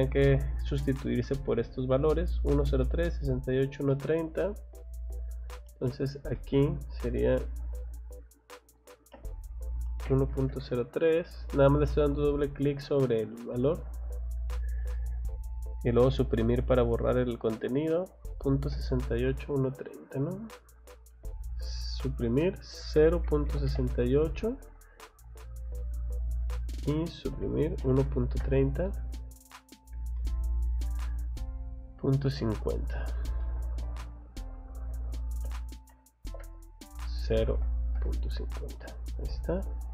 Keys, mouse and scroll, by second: 2.8 middle click, 3.5 scroll down 1, 3.9 middle click, 4.4 middle click, 5.4 scroll up 1, 6.3 middle click, 7.4 click, 7.6 click, 11.6 click, 14.1 scroll down 1, 14.9 middle click, 16.7 scroll up 1, 17.5 middle click, 18.6 scroll down 1, 19.0 middle click, 19.8 middle click, 20.9 click, 24.5 click, 25.2 click, 26.0 click, 29.3 click, 29.6 scroll down 1, 30.2 middle click, 31.0 scroll up 1, 31.9 scroll down 1, 32.3 middle click, 33.4 middle click, 34.1 click, 37.4 Left, 38.9 click, 39.4 scroll down 1.